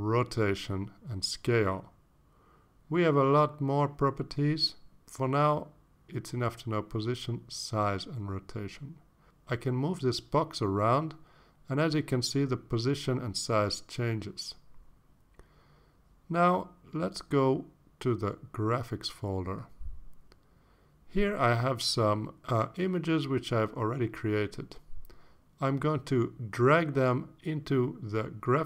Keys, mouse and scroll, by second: 4.0-4.3 scroll down 2, 11.2-13.5 drag, 16.7 ctrl+z, 18.5 ctrl+s, 19.3 click, 19.6 click, 20.0 alt+Tab, 20.2 alt+Tab, 21.5 click, 22.4 click, 22.9 click, 23.4 click, 23.9 click, 24.4 click, 25.8 shift+click, 26.8-28.6 shift+drag.